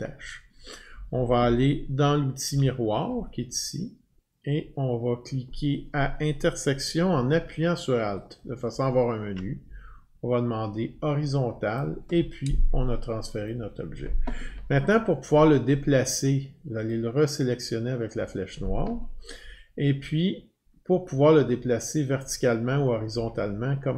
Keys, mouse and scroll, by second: 2.5 o, 8.4 alt+click, 11.8 click, 13.5 click, 16.9 click, 18.1 click, 20.0 scroll down 1, 20.5-22.4 scroll down 54, 21.4-21.8 Down, 22.4-23.2 Down.